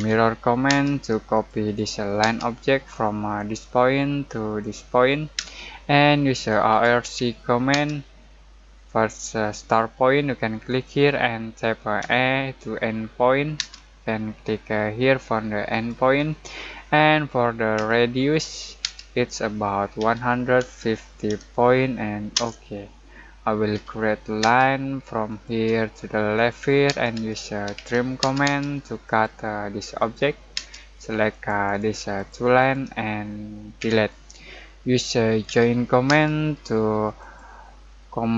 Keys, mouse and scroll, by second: 0.0-0.7 typing, 1.3 click, 2.2 space, 3.3 click, 5.3-7.7 typing, 10.6 click, 12.0 e, 13.5 space, 15.7 click, 17.7 r, 19.9 1, 21.0-21.7 typing, 22.3 Return, 23.7 l, 24.4 space, 25.2 click, 26.8-28.2 typing, 29.0 click, 30.5 space, 31.3 click, 33.7 Delete, 35.4 j, 36.0 space, 37.1 click.